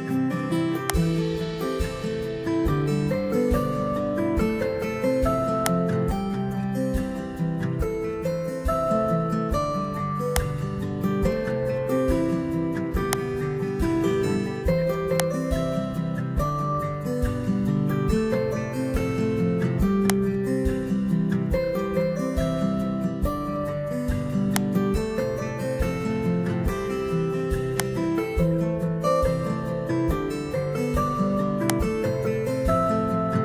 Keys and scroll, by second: 1.8 Return, 3.8 ctrl+v, 8.0 ctrl+c, 11.4 ctrl+v, 14.3 BackSpace, 22.3 Delete, 32.9 Delete.